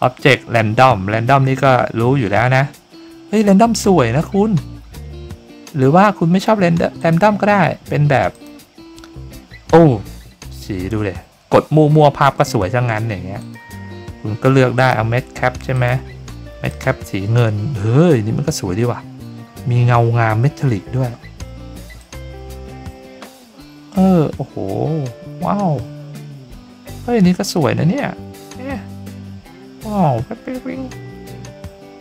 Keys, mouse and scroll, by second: 7.0 click, 8.3 click, 13.4 click, 14.7 click, 15.7 click, 16.7 click, 22.0-32.0 drag.